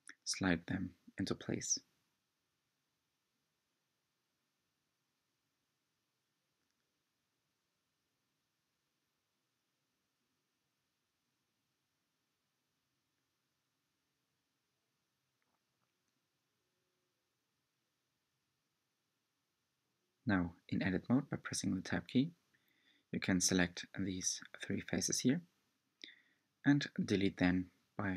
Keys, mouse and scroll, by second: 1.7 r, 8.2-9.7 middle drag, 10.6 r, 14.6-15.9 middle drag, 16.3 r, 19.6-20.9 middle drag, 20.9 Tab, 21.4 click, 22.7 h, 23.8 Tab, 25.2-26.7 middle drag, 26.7 3, 26.9 click.